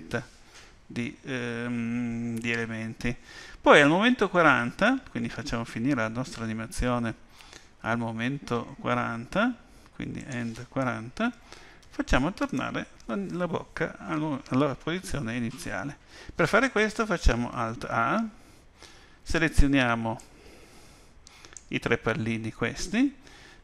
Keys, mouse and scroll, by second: 10.2 click, 17.8 alt+a, 19.2 b.